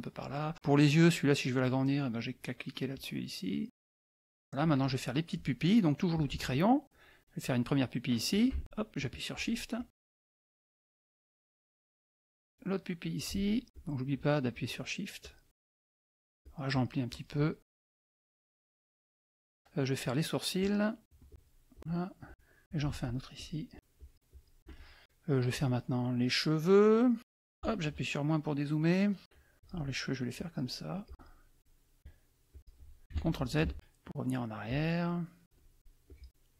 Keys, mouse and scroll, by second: 1.5 click, 2.9 click, 3.7 click, 6.1 click, 8.3 shift+click, 9.3 shift+click, 9.7-11.6 shift+drag, 12.9 click, 13.7 shift+click, 14.1 shift+click, 15.2-17.0 shift+drag, 17.1-18.7 shift+drag, 18.8 click, 20.6 click, 21.3 shift+click, 21.7 shift+click, 21.8 shift+click, 22.2 shift+click, 22.6 shift+click, 23.0 shift+click, 23.5 shift+click, 25.0 click, 25.5 click, 26.7 click, 27.6 KP_Subtract, 28.4 click, 29.5 shift+click, 30.3 shift+click, 31.1 shift+click, 32.5 shift+click, 33.3 ctrl+shift+z, 34.7 shift+click, 35.4 shift+click, 35.8 shift+click.